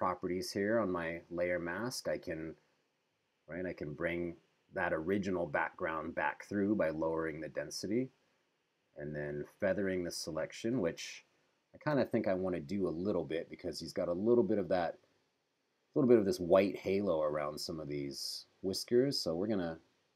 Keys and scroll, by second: 11.4 super+=.